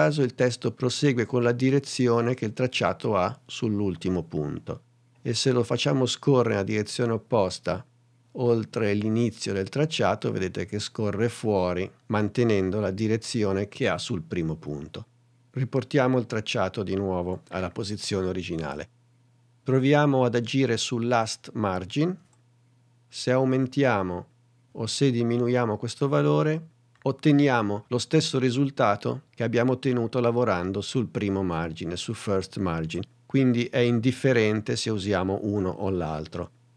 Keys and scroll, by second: 17.4 super+z, 33.8 shift+super+z.